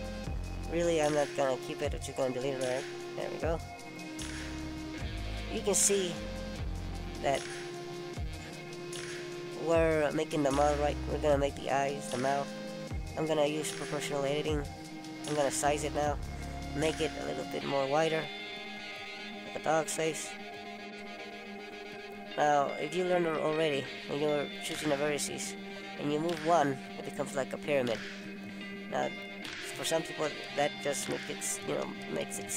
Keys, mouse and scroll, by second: 1.1-1.5 scroll up 2, 1.6 middle click, 2.1 scroll down 3, 2.6 middle click, 4.6 middle click, 8.8 click, 9.9 click, 18.4 middle click, 22.4 click, 23.1 middle click, 28.1 click, 28.9 click.